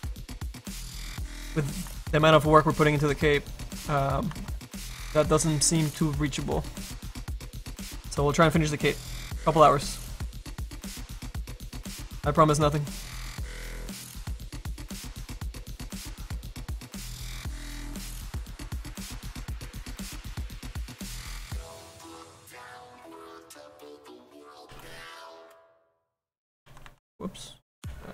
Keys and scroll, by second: 26.8 ctrl+z.